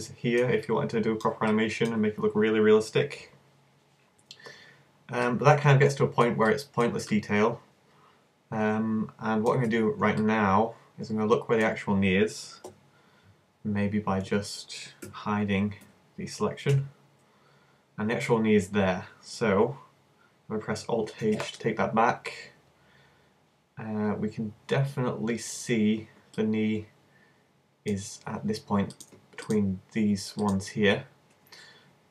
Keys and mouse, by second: 8.8 middle click, 9.7 z, 12.7 KP_1, 13.6 z, 15.1 a, 15.8 a, 16.7 h, 21.2 alt+h, 24.6 z, 25.5 z, 28.9-32.1 middle drag.